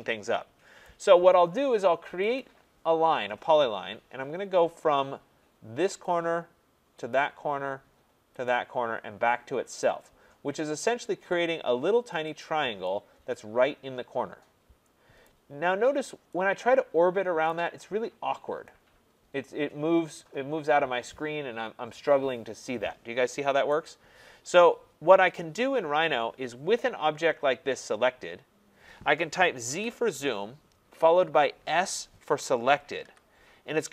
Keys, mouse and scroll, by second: 0.8 right click, 2.4 click, 6.0 click, 7.2 click, 8.4 click, 9.8 click, 10.9 click, 12.3 click, 15.2 right click, 15.8 scroll, 17.1 middle click, 17.5 right click, 21.1 scroll, 23.7-25.4 right drag, 26.3-27.1 scroll, 27.3 scroll, 27.8-28.7 scroll, 29.6 z, 30.0 Return, 33.0 s.